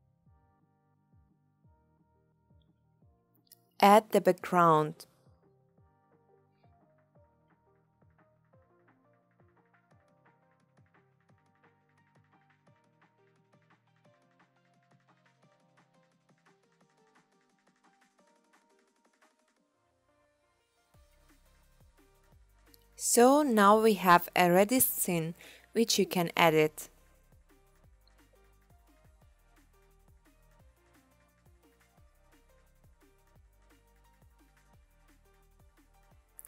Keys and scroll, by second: 2.4-3.3 typing, 10.0 Return, 10.1-12.7 typing, 12.9 Return, 17.6 0, 27.8 0.